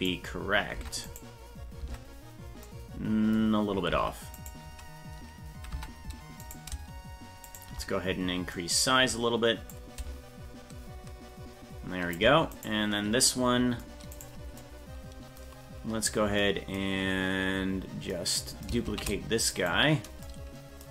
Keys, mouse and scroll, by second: 0.0 right click, 0.8 Tab, 1.1 right click, 1.8 Tab, 3.9 Tab, 4.4 right click, 5.7 Tab, 6.5 right click, 7.5 shift+right click, 9.8-12.2 drag, 12.6 right click, 14.2 right click, 18.9 shift+d.